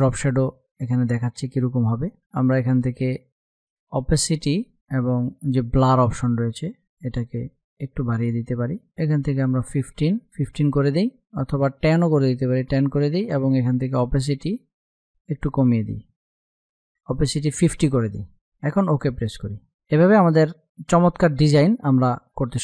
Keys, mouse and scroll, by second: 3.2 click, 5.3 click, 6.4 Up, 7.4 Down, 8.1 Up, 10.8 Down, 13.2 click, 13.9 Down, 18.0 click.